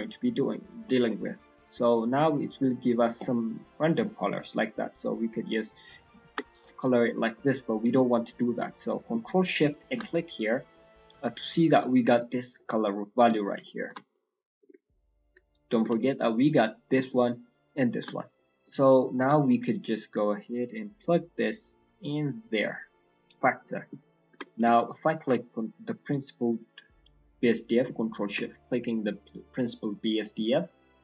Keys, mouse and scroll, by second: 0.9-1.4 scroll up 2, 1.4-2.3 scroll down 5, 2.6 middle click, 4.4 click, 6.9-7.7 scroll down 8, 7.1 middle click, 7.7 middle click, 8.3 scroll down 2, 8.6 middle click, 9.8 ctrl+shift+click, 10.1 middle click, 12.5 middle click, 13.7 ctrl+shift+click, 14.1 middle click, 15.2 ctrl+shift+click, 18.0 ctrl+shift+click, 18.3 middle click, 19.3 middle click, 21.0 middle click, 21.9 click, 23.4 middle click, 23.6 scroll up 4, 24.4 middle click, 25.2 ctrl+shift+click, 28.7-29.6 scroll down 3, 29.0 middle click, 29.6 middle click, 29.8-31.0 scroll up 5, 30.2 middle click.